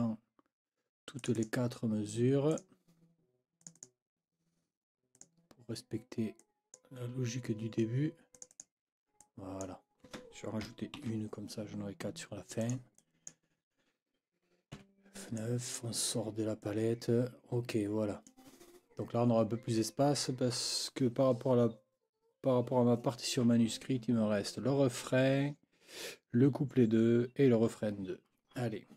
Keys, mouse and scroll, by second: 1.2 click, 2.5 click, 3.6 click, 5.1 click, 6.4 click, 8.3 click, 9.2 click, 11.0 ctrl+b, 12.6 click, 13.0 click, 14.7 F9, 15.4 click, 16.6-18.5 scroll up 2.